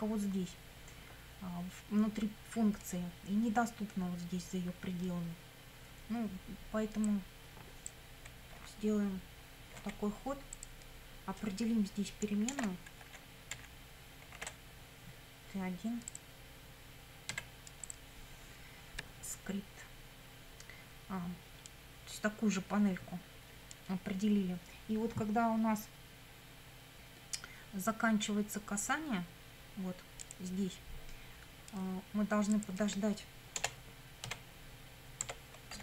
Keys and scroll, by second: 9.7 ctrl+c, 12.5 shift+Return, 13.5 Up, 14.4 ctrl+v, 17.3 1, 33.6 Return, 34.3 w, 35.2 Tab, 35.5-35.8 typing.